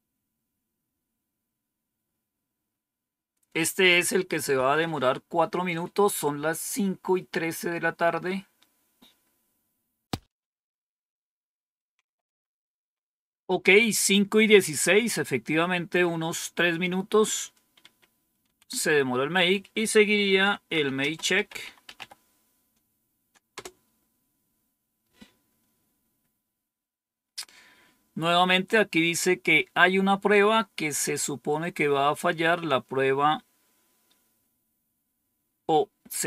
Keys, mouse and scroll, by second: 17.7 Up, 18.3 Down, 20.0-22.4 typing.